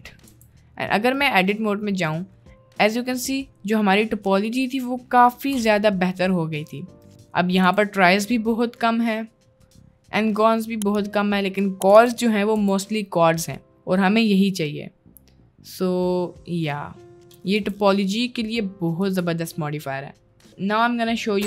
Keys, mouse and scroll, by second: 0.0 ctrl+a, 0.4 Tab, 0.8 middle click, 1.6 middle click, 2.5-5.3 middle drag, 5.6 Tab, 5.9 middle click, 6.4 middle click, 7.0 middle click, 7.1 Tab, 7.3 middle click, 7.7 Tab, 8.1 click, 8.7 click, 10.2 click, 12.0 Tab, 12.6 Tab, 13.2 middle click, 13.7 middle click, 14.9 middle click, 15.9-17.3 middle drag, 17.6 Tab, 17.9-18.7 middle drag, 19.0 middle drag.